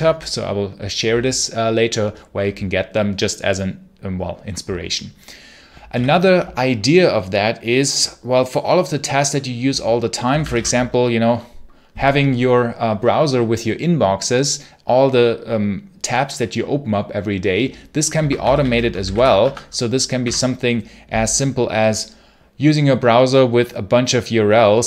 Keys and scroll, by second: 5.8 ctrl+l, 9.9-10.9 typing, 18.0 ctrl+c, 18.2-19.5 typing, 20.1 Return.